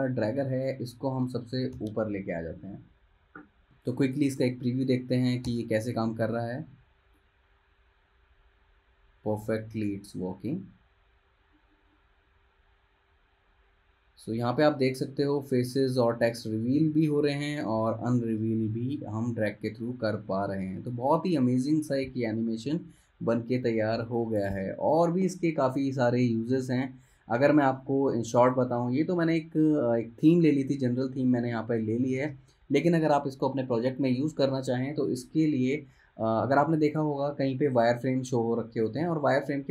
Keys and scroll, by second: 1.9 shift+super+], 5.6 super+Return, 27.8 space.